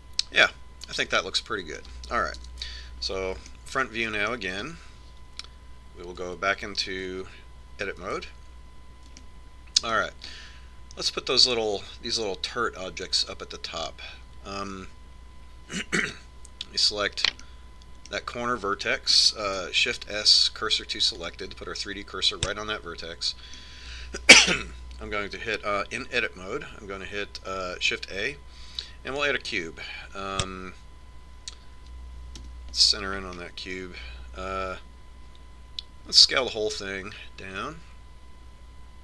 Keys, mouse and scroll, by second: 3.5 KP_1, 4.7-6.3 middle drag, 8.2 Tab, 10.3-11.3 middle drag, 17.2-19.1 right drag, 18.5 click, 18.9-20.5 middle drag, 20.7 shift+s, 23.7-25.5 middle drag, 29.0 shift+a, 33.6 KP_Decimal, 34.5-36.9 middle drag, 37.4 s.